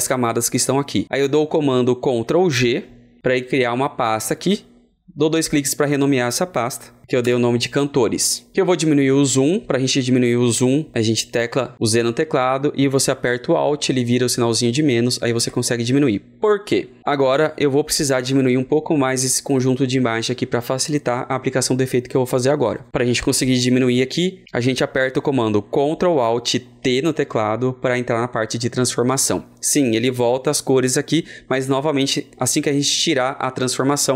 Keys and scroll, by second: 2.5 ctrl+g, 26.7 ctrl+alt+t.